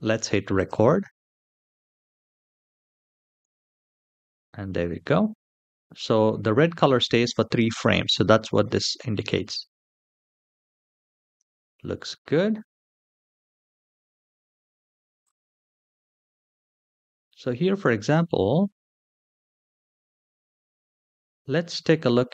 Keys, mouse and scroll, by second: 0.3-2.4 drag, 3.1 space, 11.1 space, 11.8 shift+middle drag, 12.4-13.0 scroll up 3, 12.9 middle click, 15.0-22.3 drag.